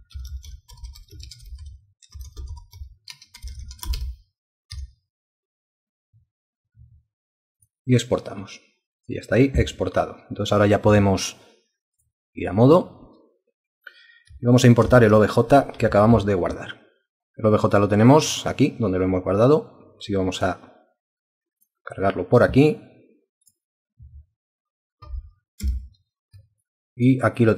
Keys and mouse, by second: 0.0-4.4 typing, 4.7 Return, 14.8 ctrl+o, 26.6 alt+click, 27.2 alt+click.